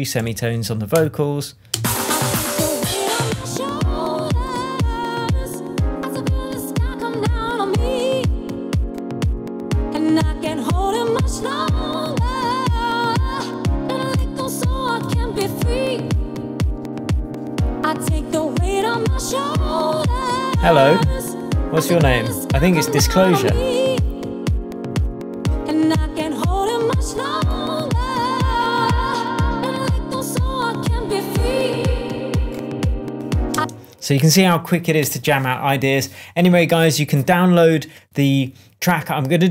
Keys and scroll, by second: 0.2 3, 0.9 Return, 1.7 space, 4.6 shift+Tab, 15.4 super+d, 33.5 space.